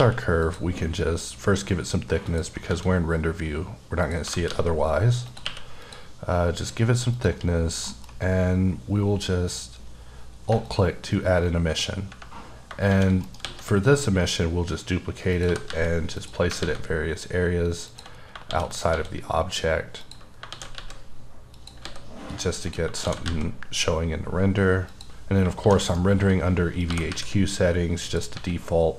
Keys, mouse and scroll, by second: 0.0 q, 0.4 click, 2.3 click, 2.7 s, 4.0 click, 4.2 g, 4.7 g, 5.3 click, 5.4 q, 5.8 click, 7.1 click, 7.8 alt+m, 10.7 alt+click, 11.7 scroll up 2, 12.6 shift+scroll down 1, 12.9 shift+d, 13.2 right click, 13.4 s, 15.3 click, 15.4 g, 15.7 z, 16.2 click, 16.6 s, 17.9 click, 18.2 scroll down 2, 18.5 d, 18.7 right click, 18.9 s, 20.0 click, 20.5 shift+d, 20.8 z, 21.5 click, 21.9 s, 22.6 click, 23.0 shift+d, 23.3 z, 24.9 click, 25.6 shift+d, 25.9 right click, 26.2 s, 26.8 click, 26.9 g, 27.1 z, 28.0 click, 28.3 s.